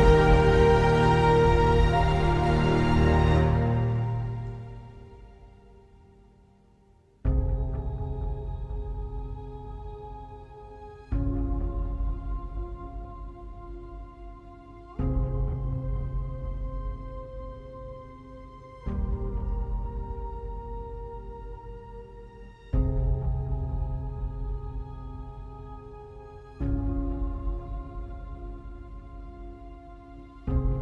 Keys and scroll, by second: 0.0 ctrl+d, 0.5 ctrl+space, 11.1 ctrl+d, 11.4 ctrl+space, 21.3 space, 23.8 space, 25.8 space, 30.1 space.